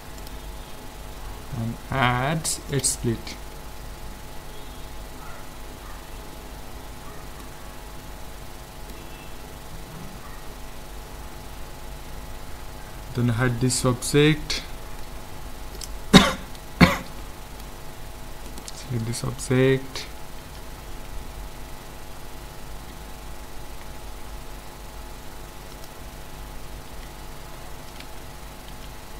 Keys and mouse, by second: 5.0-13.2 middle drag, 13.4 h, 15.0-17.2 middle drag, 18.5-20.0 drag, 20.0 right click, 20.5 KP_5, 21.7 Tab, 22.9 Tab, 23.7 Tab, 25.7-27.5 drag, 26.9 a, 28.0 KP_1, 28.7 KP_5.